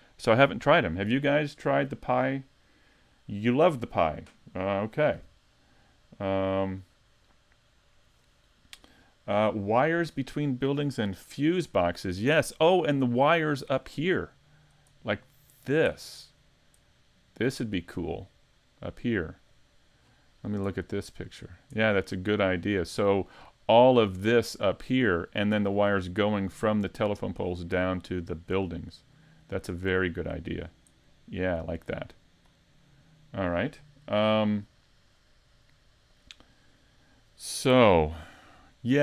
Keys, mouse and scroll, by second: 13.8-14.2 scroll down 3, 14.2 middle click, 14.9-15.5 scroll down 1, 15.5 scroll down 1, 15.9 middle click, 16.4-16.9 scroll up 2, 16.9 middle click, 20.0-20.5 scroll down 8, 20.8 middle click, 21.4-21.8 scroll down 2, 21.8 middle click, 22.3-22.8 scroll up 4, 22.8 middle click, 23.7 middle click, 29.1 middle click, 30.4-31.8 scroll down 1, 31.8 click, 32.8 middle click, 38.0 middle click.